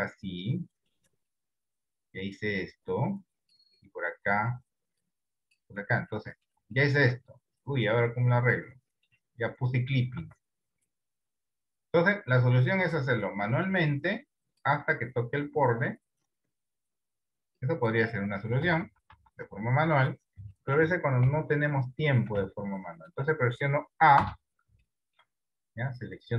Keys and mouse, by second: 0.9 click, 3.2 click, 5.1 click, 5.8 Tab, 6.4 middle click, 6.9 shift+middle click, 7.4-9.1 middle drag, 9.8 click, 10.2 Tab, 13.9 click, 17.2 click, 18.7 ctrl+z, 18.9 ctrl+z, 19.3 ctrl+z, 19.5 ctrl+z, 20.6 middle click, 21.4 KP_7, 22.7 middle click, 24.3 a, 24.9 shift+middle click, 25.5-26.3 middle drag.